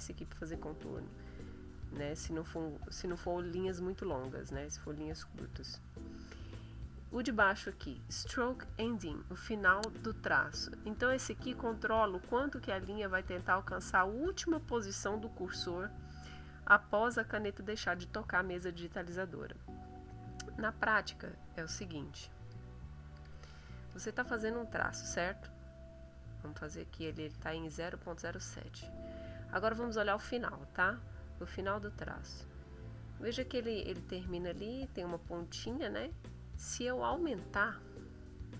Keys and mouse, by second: 1.3 click, 21.7 click, 22.4 click, 23.1 click, 23.8 click, 26.0 click, 28.7 click, 31.1 click, 33.4 click, 35.3 click.